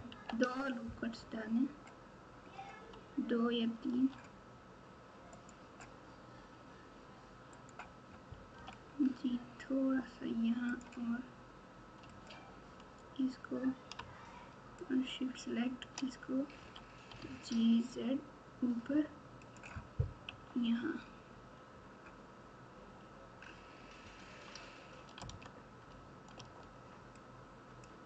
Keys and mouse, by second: 0.0 ctrl+r, 8.5 g, 10.6 z, 10.7 z, 12.1 alt+click, 14.8 shift+click, 15.0 shift+click, 16.6 g, 20.2 KP_1, 25.1 z, 26.3 alt+z, 27.1 click, 27.3 click.